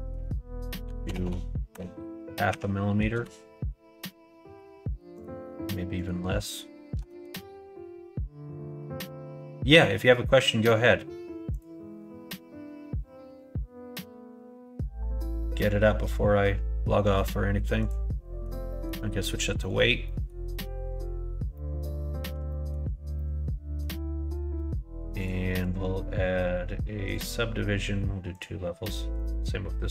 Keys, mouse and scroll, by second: 1.1 KP_0, 5.1-8.5 drag, 11.4-17.8 drag, 18.6 middle click, 19.5 middle click, 20.0 middle click, 21.4 middle click, 22.4 shift+middle click, 23.0 middle click, 25.1 click, 25.4-27.1 drag.